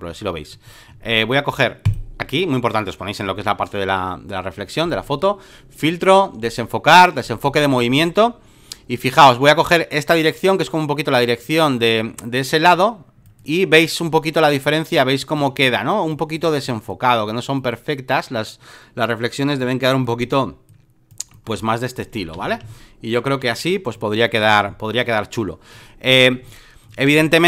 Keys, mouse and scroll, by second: 4.9-9.4 drag, 9.6-19.5 drag, 19.6-22.3 drag, 22.3 v, 23.7 space, 23.9 click, 26.4 space, 26.5 click, 27.2 click.